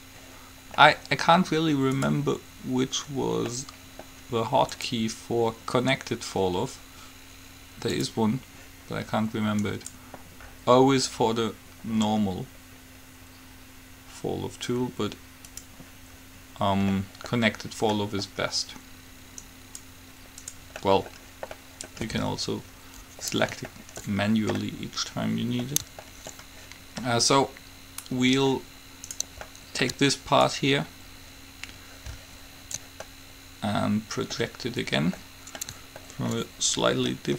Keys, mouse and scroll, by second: 2.1 click, 3.0 click, 3.8 middle click, 5.0-6.0 drag, 9.9 right click, 11.7 scroll down 1, 17.1 middle click, 19.7 middle click, 19.7-21.0 right drag, 21.0 middle click, 21.2 right click, 21.3 click, 21.4 right click, 23.5 middle click, 25.6-28.7 middle drag, 29.3-31.0 right drag, 29.6-32.3 middle drag, 30.6-32.5 drag, 33.2-37.3 middle drag.